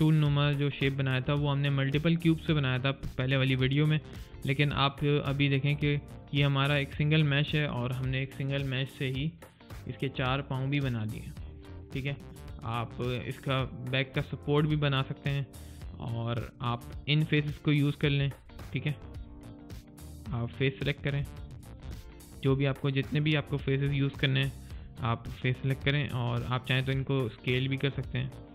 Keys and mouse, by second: 0.6 alt+click, 4.5 alt+click, 4.9 alt+right click, 5.3 alt+middle click, 5.7 alt+click, 11.3 alt+right click, 11.6 alt+click, 12.0 alt+middle click, 12.3 alt+click, 13.5 alt+right click, 14.0 alt+middle click, 14.6 alt+click, 15.5 alt+right click, 15.9 alt+middle click, 16.3 alt+click, 18.2 alt+right click, 18.4 alt+click, 19.2 alt+right click, 20.9 alt+click, 22.2 alt+right click, 22.6 alt+middle click, 24.7 alt+click.